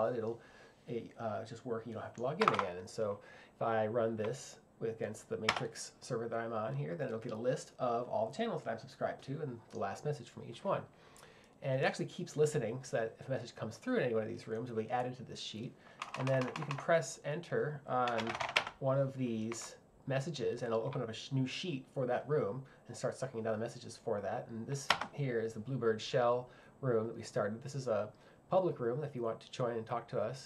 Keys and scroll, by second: 2.4 Print, 5.5 Return, 18.0-18.9 typing.